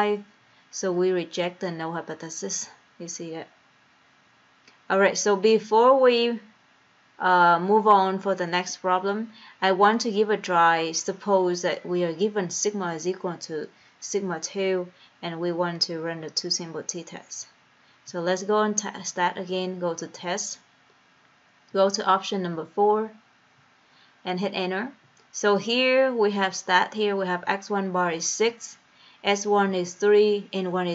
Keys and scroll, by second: 19.7 Right, 20.4 Right, 21.9 Down, 22.1 Down, 22.3 Down, 23.0 Down, 23.8 Up, 25.3 Return, 27.2 Return, 28.7 Down, 29.9 Down.